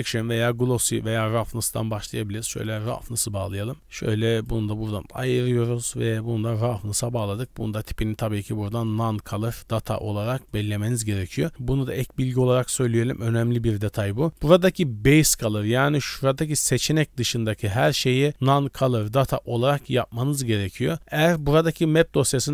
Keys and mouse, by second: 3.8 click, 4.9-6.5 drag, 7.7-10.7 drag, 12.3 click, 15.5 d, 16.0 d, 16.0 d, 16.1 d, 16.2-17.3 drag, 17.3 d, 17.4 d, 19.2 d, 19.3 click.